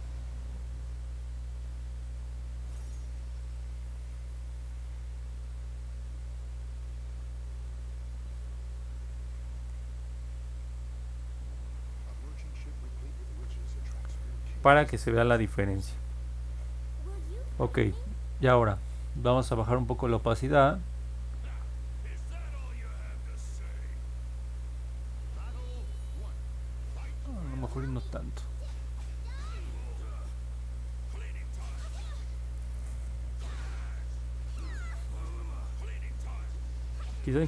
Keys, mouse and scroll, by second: 0.2 click, 0.5 click, 0.9 click, 1.2 click, 1.4 click, 2.0 click, 2.5 click, 2.7 click, 3.2 click, 5.4 click, 5.8 click, 6.1 click, 6.4 click, 6.7 click, 6.9 click, 7.2 click, 7.5 click, 7.7 click, 7.9 click, 8.2 click, 8.5 click, 8.7 click, 9.0 click, 9.3 click, 9.5 click, 9.8 click, 10.1 click, 10.4 click, 10.6 click, 10.9 click, 11.1 click, 11.4 click, 11.6 click, 14.2-14.7 scroll down 4, 14.9 scroll up 2, 15.4-16.4 alt+middle drag, 16.7 scroll up 1, 17.6 click, 19.3 click, 20.1-30.0 drag, 30.6-31.0 scroll down 2, 31.7-32.8 alt+middle drag, 34.2-36.1 alt+middle drag, 36.2-36.9 scroll up 2, 36.9 middle click.